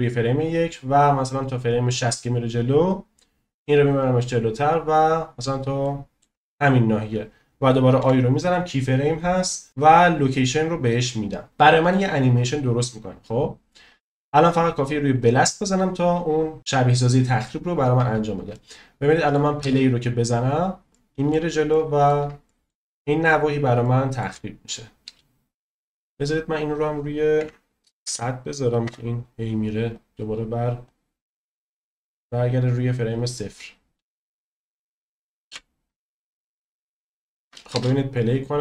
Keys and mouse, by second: 0.5-2.0 drag, 3.4 click, 5.8-6.2 shift+middle drag, 8.0 i, 11.6-14.1 drag, 15.5-16.6 drag, 18.5-19.3 shift+middle drag, 19.6 space, 20.9-21.3 middle drag, 21.7-22.0 shift+middle drag, 22.4 middle click, 22.9-23.3 shift+middle drag, 23.8-24.2 shift+middle drag, 25.0 space, 26.8-28.8 drag, 28.0 0, 29.9-30.4 drag, 30.7 click, 32.3-32.7 drag, 33.0 click, 35.5 n, 37.3 shift+middle click, 37.7 space.